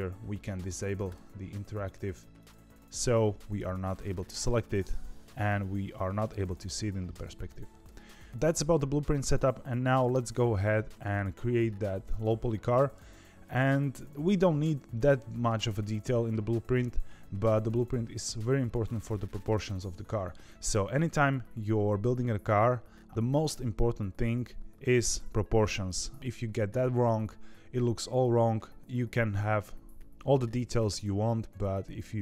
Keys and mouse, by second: 1.0 click, 2.3-3.4 drag, 4.4 middle click, 7.1 KP_1, 7.8 KP_3, 8.3 shift+middle click, 9.2 shift+middle click, 10.0 shift+middle click, 15.0 shift+middle click, 15.9 shift+middle click.